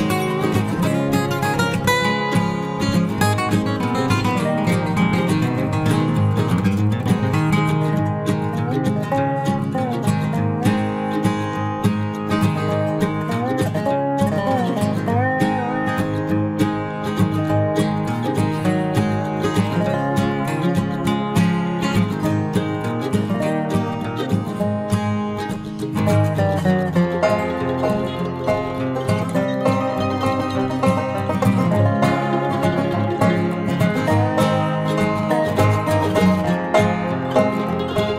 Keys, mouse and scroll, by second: 0.0 ctrl+Tab, 1.9 right click, 2.2 c, 4.7 c, 9.0-10.9 right drag, 10.3 c, 14.0-15.8 right drag, 14.7 c, 15.8 c, 24.2 c, 28.8-30.6 right drag, 29.9 i, 30.7 KP_Decimal, 31.3 middle click, 31.8 z, 33.5-35.0 drag, 34.9 KP_3, 35.2 click, 35.2 KP_Decimal, 35.7 Tab, 36.8 Tab.